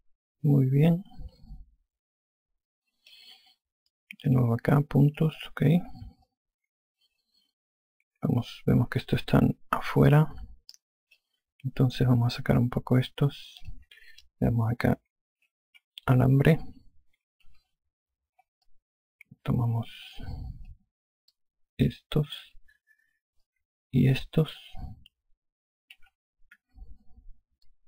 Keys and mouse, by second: 5.2 click, 7.1 alt+click, 13.6 alt+click, 16.1-17.1 typing, 18.3 5, 19.5 alt+click, 22.2 click, 24.3 shift+click, 26.4-27.4 typing.